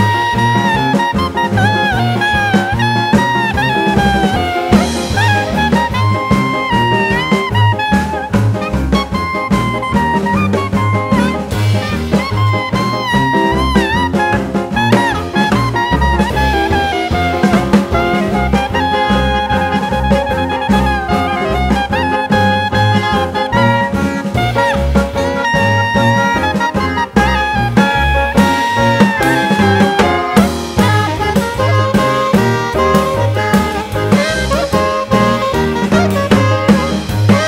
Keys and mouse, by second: 0.0 shift+click, 0.2 0, 0.6 g, 1.2 shift+click, 1.4 0, 1.6 shift+click, 2.1 shift+click, 2.4 shift+click, 3.0 click, 3.3 click, 3.5 g, 4.2 shift+click, 4.4 0, 4.6 shift+click, 5.1 click, 5.8 click, 6.1 shift+click, 6.6-8.6 typing, 7.2 shift+click, 7.6 shift+click, 8.1 shift+click, 8.5 shift+click, 9.1 click, 9.3 click, 9.4 click, 9.7 g, 10.3 shift+click, 10.5 1, 10.7 shift+click, 10.9 1, 11.3 click, 11.6 click, 11.9 click, 12.2 shift+click, 12.7 g, 13.6 shift+click, 14.0 shift+click, 14.6 shift+click, 14.9 shift+click, 15.5 click, 15.8 click, 16.0 g, 16.6 shift+click, 16.9 shift+click, 18.9-19.9 drag, 21.5 click, 22.3-23.0 drag, 25.0 click, 29.1-30.4 drag, 31.0 click, 33.2 click, 36.3-37.4 drag.